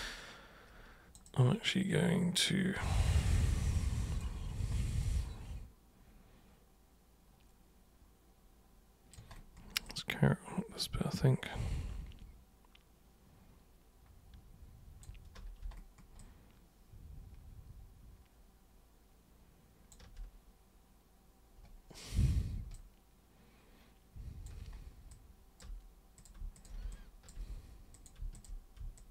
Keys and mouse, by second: 0.0-3.2 alt+super+drag, 3.7 alt+super+click, 5.0-9.1 alt+super+drag, 9.8-15.0 alt+super+drag, 16.2-19.9 alt+super+drag, 22.7-24.5 alt+super+drag, 25.1 alt+super+click, 26.1 super+click, 26.5 shift+super+click, 26.9 alt+super+click, 27.9 super+click, 28.3 shift+super+click, 28.9-29.1 shift+super+drag.